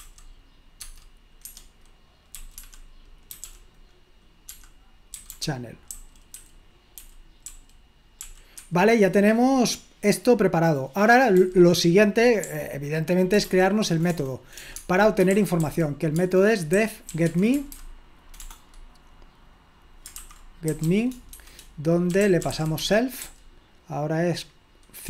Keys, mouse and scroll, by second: 0.8 Tab, 1.5 Escape, 2.4 f, 4.5-8.2 typing, 8.6 Escape, 11.4 j, 12.4-18.4 typing, 20.5-23.2 typing.